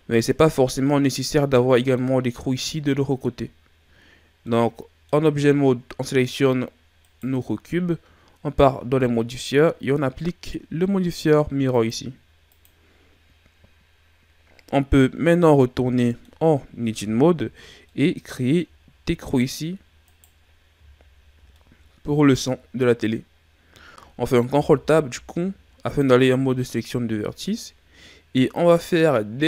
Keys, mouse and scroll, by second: 0.9-3.9 middle drag, 4.5-7.0 middle drag, 7.0 right click, 11.7 click, 16.0 middle click, 16.6 scroll up 1, 16.8 Tab, 17.9 middle click, 18.8-20.1 scroll up 3, 20.1 right click, 20.5 scroll down 3, 21.0-21.5 shift+scroll up 1, 21.5-23.1 middle drag, 23.1-24.2 scroll up 2, 24.5 ctrl+Tab, 26.8-27.6 ctrl+scroll up 3, 27.6-28.5 scroll up 1, 28.5 right click.